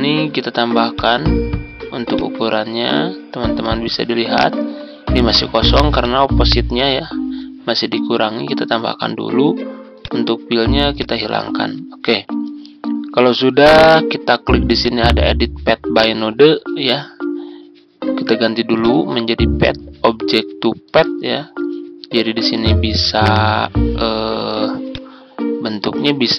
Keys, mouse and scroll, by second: 0.9-26.3 drag.